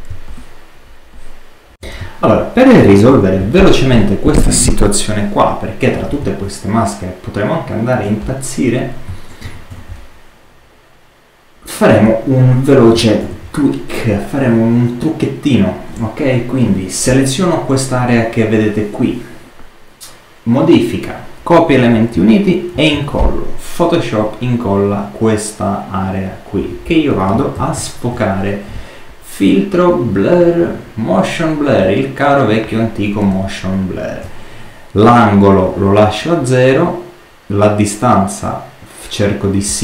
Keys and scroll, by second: 1.7 super+-, 1.9 super+space, 3.0 super+-, 9.3 super+-, 13.1 super+-, 22.6 super+v, 27.4 super++.